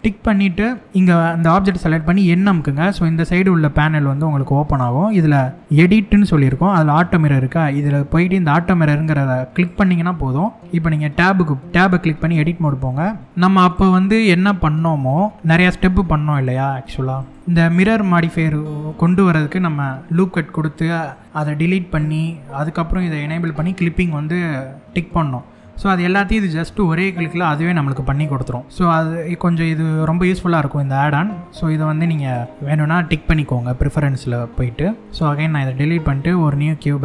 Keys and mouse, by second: 2.1 n, 9.2 click, 11.9 Tab, 13.2 middle click, 13.4 click, 15.9 click, 16.6 3, 17.4 e, 20.7 right click, 25.0 middle click, 30.8 Tab, 31.8 click, 32.5 middle click, 35.1 x, 35.8 shift+a.